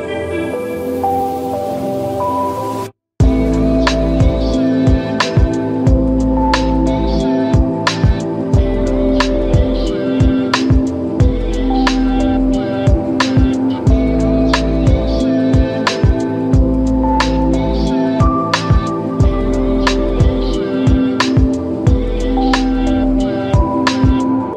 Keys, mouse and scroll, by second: 1.8 scroll down 1, 3.0-3.5 middle drag, 4.1-5.3 scroll up 1, 9.3 click, 10.0 scroll down 1, 10.5-11.4 scroll up 1, 11.4-11.9 drag, 13.9-14.7 scroll up 1, 15.4 click, 17.1 click, 19.5 click, 21.0-22.8 drag.